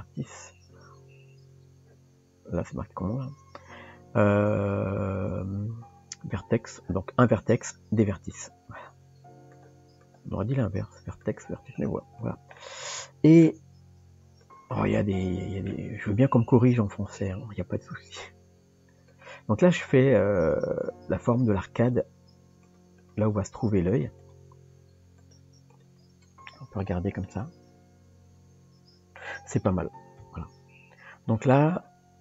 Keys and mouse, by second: 8.3 click, 10.0 click, 11.7 click, 12.2 click, 12.6 middle click, 14.8 middle click, 18.2 click, 19.8 click, 21.8 click, 23.0 click, 24.2 click, 25.7 click, 26.3 Tab, 27.2-29.3 middle drag, 30.2 KP_3.